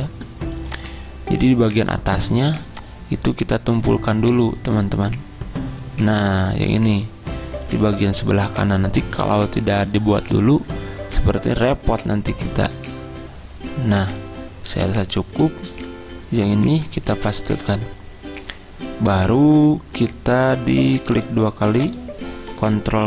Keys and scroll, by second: 15.8 ctrl+c, 17.2 ctrl+v, 17.6 Return.